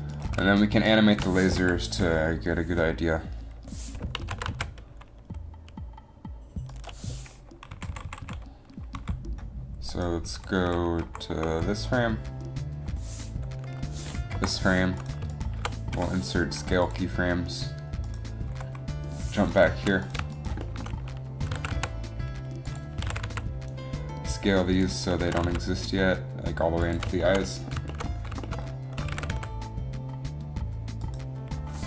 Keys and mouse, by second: 1.7 KP_3, 4.3 s, 7.9-8.2 Left, 8.4 Left, 9.0 Down, 10.4 Down, 10.8 Down, 11.2 Up, 11.6 Down, 14.5 Up, 16.0 i, 18.7 Down, 21.5 s, 23.2 s, 25.4 s, 29.2 s.